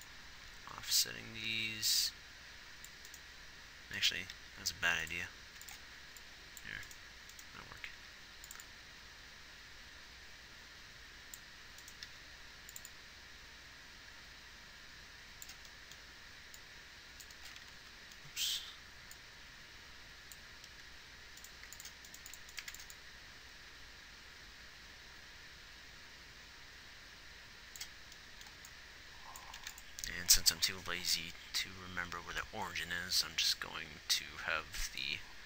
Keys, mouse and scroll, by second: 0.1-1.2 drag, 4.4 g, 5.8 x, 6.2-8.0 drag, 8.0 g, 12.1 click, 17.9 ctrl+z, 21.8 x, 22.4 x, 23.0-23.8 scroll down 1, 23.8 scroll up 1, 25.1-26.3 right drag, 29.7 ctrl+s.